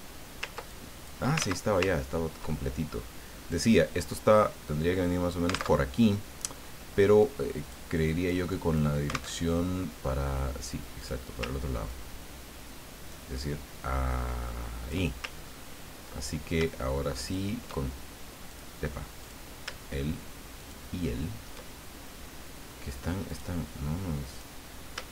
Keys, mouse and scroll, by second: 0.7 ctrl+click, 1.4 ctrl+z, 1.9-2.2 ctrl+scroll down 2, 2.4 ctrl+middle click, 3.5-5.8 drag, 5.9 alt+Tab, 7.2 click, 8.0 click, 9.3 alt+Tab, 11.0 click, 11.9-15.2 ctrl+drag, 15.4-16.0 ctrl+scroll up 2, 17.1 shift+click, 18.5 click, 19.2 click, 20.6 shift+click, 22.2-22.5 scroll up 2, 23.3 click, 24.3 click.